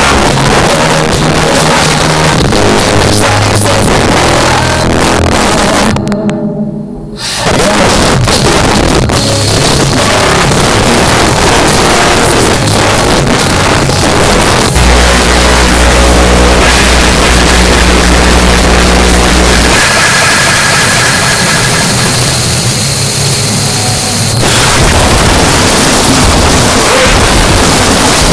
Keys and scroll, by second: 0.5 Down, 0.6 Down, 0.8 Down, 0.9 Down, 1.1 Down, 1.3 Down, 1.9 Return.